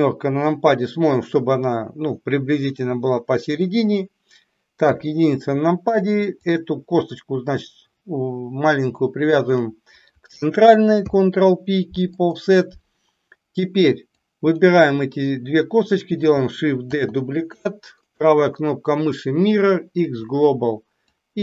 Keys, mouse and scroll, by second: 4.8 KP_1, 9.3 shift+click, 11.0 ctrl+p, 14.2 click, 16.8 shift+d, 18.0-20.2 right drag, 21.2-21.4 drag.